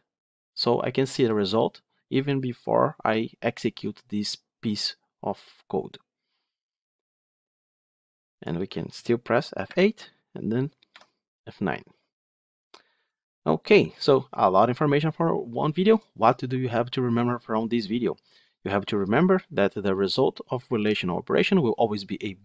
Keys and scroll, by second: 9.6 F8, 10.7 F9.